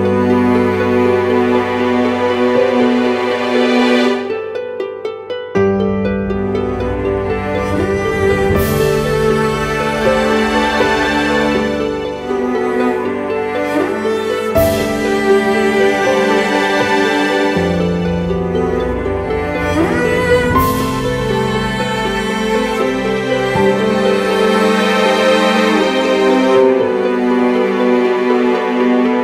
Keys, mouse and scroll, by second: 19.0 right click, 20.8-21.3 typing, 21.6 double click, 26.5 typing, 27.2 double click.